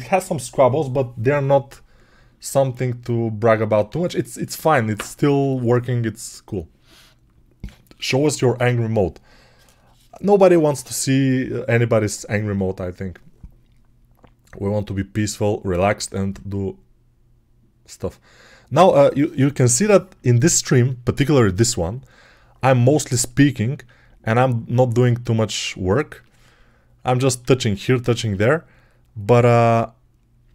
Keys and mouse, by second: 27.3 alt+q, 28.1 g.